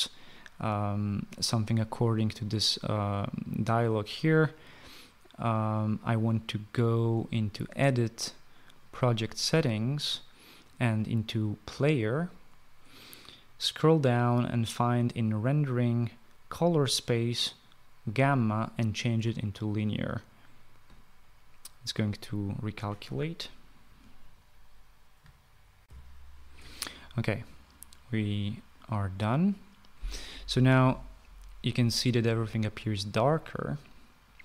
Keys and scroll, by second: 26.0 shift+F9, 26.1 shift+F9.